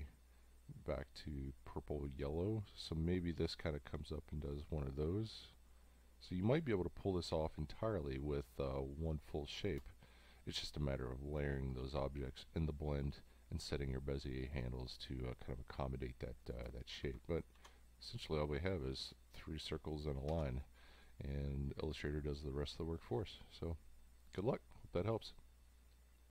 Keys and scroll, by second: 9.8 space, 16.6 space, 17.5 ctrl+y, 20.3 ctrl+y.